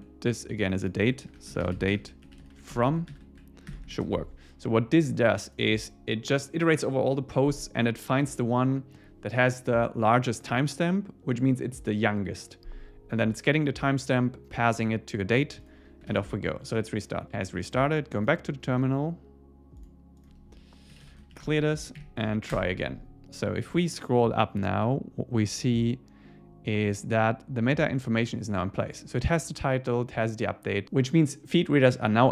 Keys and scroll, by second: 3.1 super+Right, 4.0 super+s, 16.1 super+s, 21.4 Return, 21.8 Up, 22.5 Return.